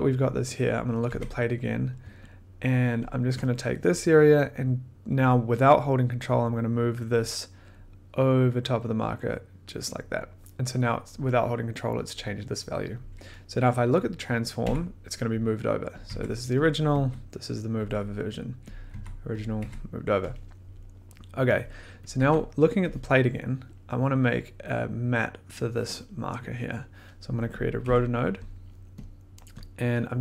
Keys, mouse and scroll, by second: 0.1 click, 0.2 middle click, 0.9 click, 1.1 1, 2.9 ctrl+click, 6.2 click, 6.3 click, 7.1 click, 9.8 click, 13.7 click, 13.8 click, 13.9 click, 14.6 1, 16.0 click, 16.0 1, 16.7 click, 16.9 2, 18.7 click, 18.9 1, 19.4 click, 19.6 1, 20.2 click, 21.1 middle click, 22.1 click, 22.2 1, 23.2 click, 26.7 click, 27.6 click, 27.8 middle click, 29.1 click, 29.2 middle click, 29.6 click, 29.7 middle click.